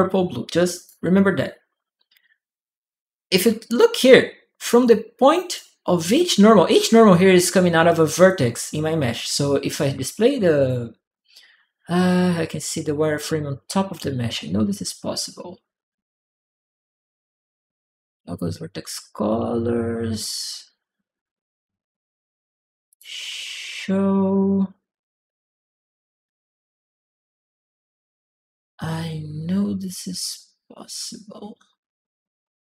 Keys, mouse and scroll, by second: 0.5 click, 3.8-5.3 drag, 3.8 right click, 9.7 click, 10.3 click, 22.7 click.